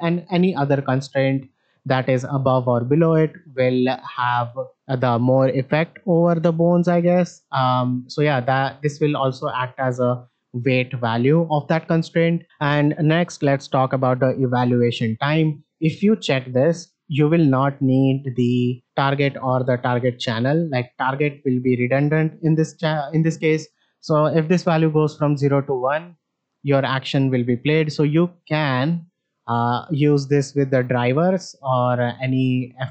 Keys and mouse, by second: 6.4-7.4 ctrl+drag, 8.9-10.1 drag, 16.5 click, 21.9 shift+middle click, 24.1-28.4 drag, 30.3-32.1 drag.